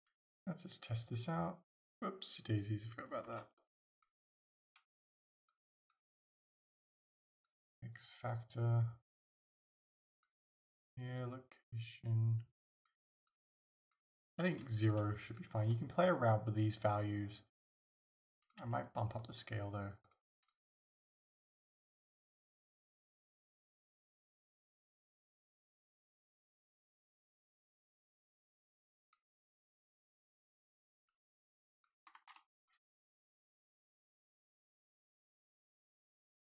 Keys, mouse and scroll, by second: 0.1-15.4 drag, 3.3 ctrl+z, 5.0 ctrl+z, 18.5 click, 20.1 click, 23.6-36.4 drag, 32.2 ctrl+z.